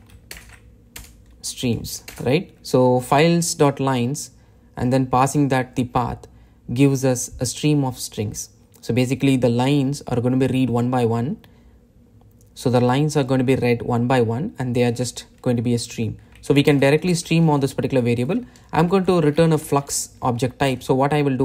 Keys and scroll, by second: 21.2 Return.